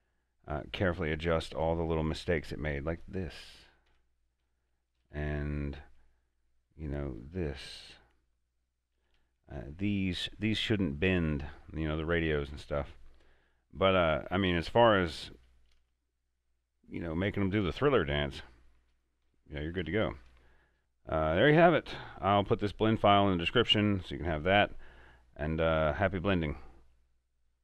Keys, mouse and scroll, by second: 0.4 middle click, 0.9-2.3 typing, 2.9 shift+click, 3.5 right click, 3.8 Tab, 5.0 shift+f, 5.1 shift+s, 5.7 shift+w, 6.3 shift+d, 7.3 shift+w, 7.4 shift+a, 8.0 shift+click, 8.9-11.1 typing, 12.4 shift+f, 12.5 shift+a, 13.1 shift+s, 13.6 shift+a, 14.6 click, 15.7 shift+f, 15.8 shift+a, 18.0 shift+s, 18.9 click, 19.2 a, 19.8 shift+f, 20.0 shift+d, 20.1 shift+w, 20.8 middle click, 21.0 scroll down 1, 21.5 scroll up 1, 21.6-24.5 middle drag.